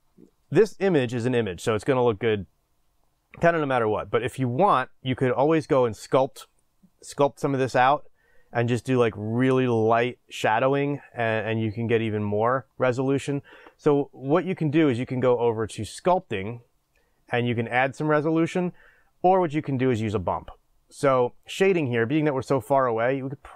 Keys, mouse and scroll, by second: 21.0 click.